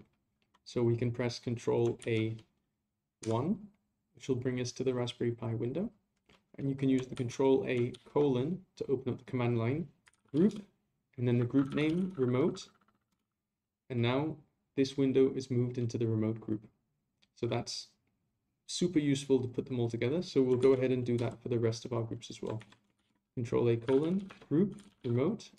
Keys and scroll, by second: 2.0 ctrl+a, 7.1 ctrl+a, 20.6 a, 22.6 ctrl+a.